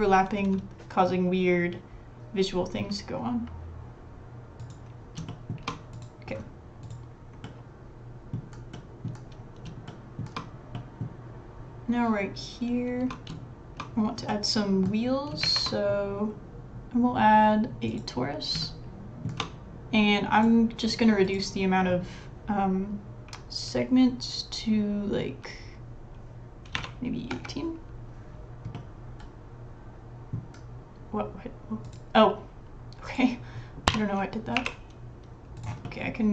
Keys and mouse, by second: 5.3 shift+middle click, 5.9 click, 7.4 middle click, 7.9 click, 8.7 click, 9.0 s, 9.9 shift+middle click, 10.7 middle click, 14.3 middle click, 15.4 shift+a, 18.4 s, 18.6 shift+middle click, 20.4 click, 28.7-30.4 middle drag, 33.9 click, 33.9 l, 34.6 l, 34.6 g, 35.8 middle click.